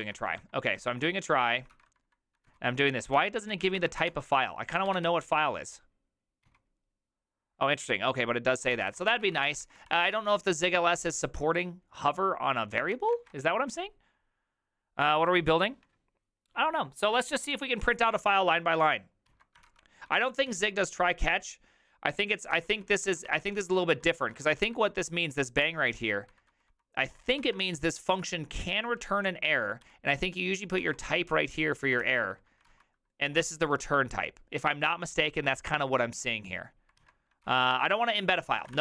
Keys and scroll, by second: 0.0 typing, 1.5-6.4 typing, 3.1 ctrl+c, 3.3 ctrl+c, 3.7 ctrl+c, 4.1 Return, 8.6-10.5 typing, 13.0 ctrl+c, 13.2 alt++, 19.3 alt+{, 19.6 ctrl+c, 20.1-20.5 typing, 22.4-28.2 typing, 23.3 ctrl+c, 29.8-34.1 typing, 32.0 ctrl+c, 34.7 alt++, 37.0 alt+{, 37.3-38.8 typing.